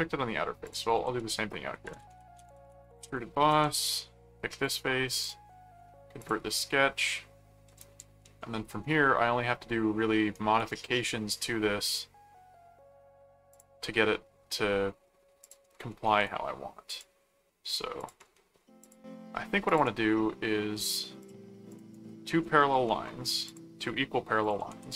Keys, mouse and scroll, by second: 0.6 click, 1.0-3.1 typing, 3.5 Return, 4.6 click, 6.2 click, 7.1 middle click, 8.2 ctrl+5, 8.8 ctrl+1, 10.3 right click, 13.5 click, 15.4 click, 16.0 right click, 16.9 click, 18.0 click, 18.8 ctrl+click, 19.7 ctrl+click, 21.2 click, 21.9 right click, 23.5 ctrl+click, 24.4 ctrl+alt+click, 24.7 ctrl+alt+q.